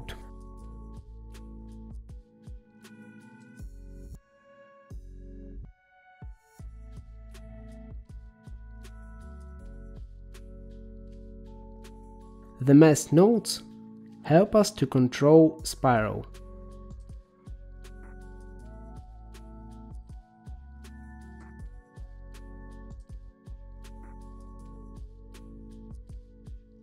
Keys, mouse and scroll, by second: 1.4 middle click, 2.0-2.6 scroll down 9, 2.6 middle click, 4.0-5.8 drag, 5.9-7.1 middle drag, 7.3-8.1 scroll up 5, 8.5 middle click, 9.3-10.1 scroll down 1, 10.1-12.0 drag, 12.9 middle click, 14.4-16.1 scroll up 6, 16.1-17.8 drag, 18.5-20.3 drag, 20.6-21.7 drag, 22.3-25.3 drag, 25.3-26.8 middle drag.